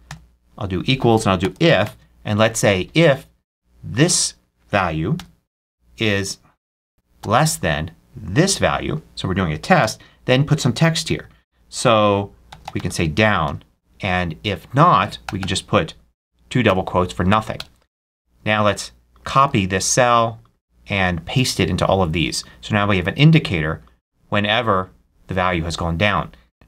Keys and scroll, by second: 1.1-2.2 typing, 5.0 ', 6.5 BackSpace, 9.7 ', 10.6 shift+,, 10.7 shift+', 12.1-15.1 typing, 16.5 shift+0, 17.4 shift+Return, 19.3 super+c, 21.2 super+v.